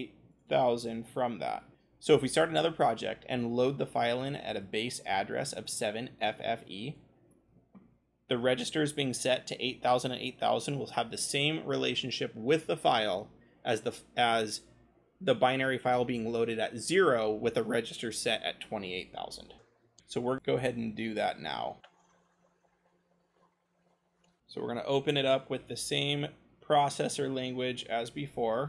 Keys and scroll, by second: 10.3 c, 24.6-26.0 typing, 26.4-27.7 scroll.